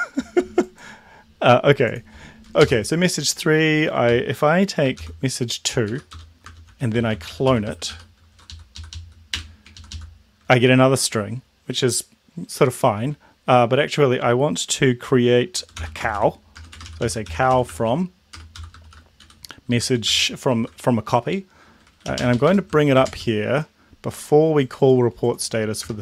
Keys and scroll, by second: 2.7 Left, 5.0 m, 5.9 Down, 6.4-9.3 typing, 8.5 Left, 8.8 Left, 9.0 Left, 9.7 ctrl+Left, 15.7-18.8 typing, 19.2 End, 19.7 Left, 20.1 shift+0, 20.6 Left, 22.2 alt+Up, 23.1 alt+Down, 25.9 BackSpace.